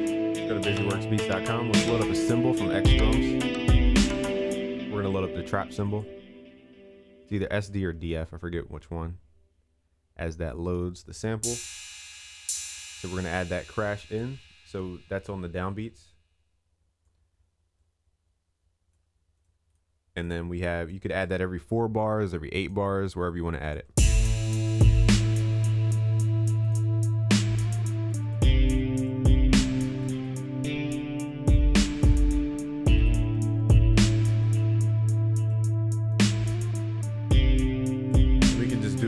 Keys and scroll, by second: 25.6 ctrl+s.